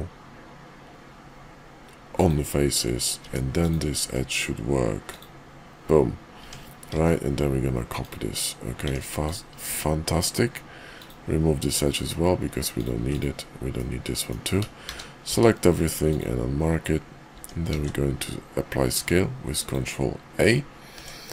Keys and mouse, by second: 3.1 Tab, 3.6 click, 4.0 x, 6.4 Tab, 6.9 alt+x, 8.0 click, 8.8 Tab, 9.2 click, 9.6 x, 11.9 click, 13.0 x, 13.7 click, 14.7 a, 15.1 q, 17.3 Tab, 17.7 ctrl+a, 20.9 Tab.